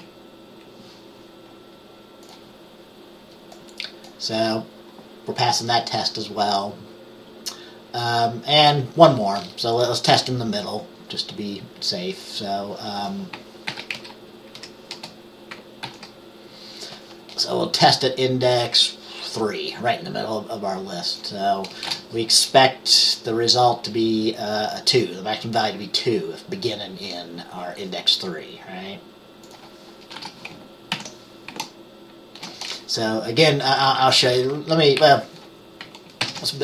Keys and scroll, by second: 0.1 F5, 13.8 ctrl+c, 14.1 Down, 14.7 Up, 15.0 Return, 22.0 BackSpace, 30.2 BackSpace, 30.3 BackSpace, 31.1 ctrl+s, 33.5 Up, 33.7 Up, 33.8 Up, 34.0 Up, 35.1 Down.